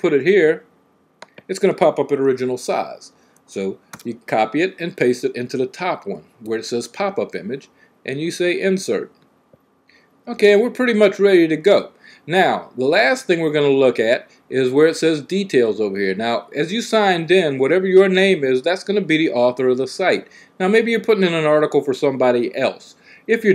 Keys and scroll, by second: 3.7 v.